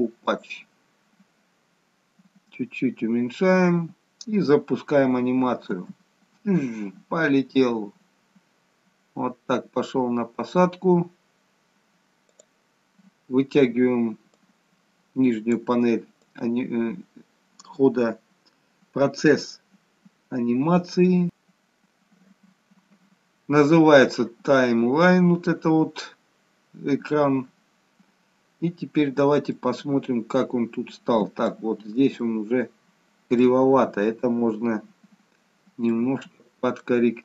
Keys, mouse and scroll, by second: 1.9-2.8 scroll down 2, 2.8-5.2 scroll up 1, 5.6 space, 12.4 click, 14.3 click, 16.2 click, 29.5 middle click, 32.1 shift+middle click, 36.0 middle click, 37.1-37.2 scroll up 3.